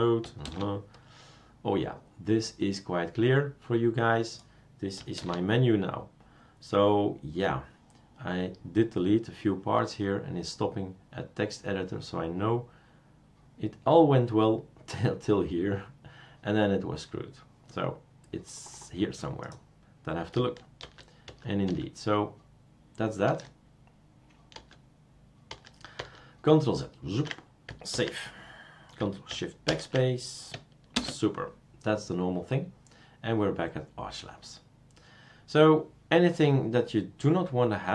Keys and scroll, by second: 0.4 super+space, 5.2 super+space, 20.8 ctrl+z, 21.2 ctrl+z, 21.6 ctrl+z, 23.3 ctrl+z, 24.6 ctrl+z, 25.5 ctrl+z, 26.0-27.4 ctrl+z, 27.9 ctrl+s, 29.7 ctrl+shift+BackSpace, 30.9 super+space.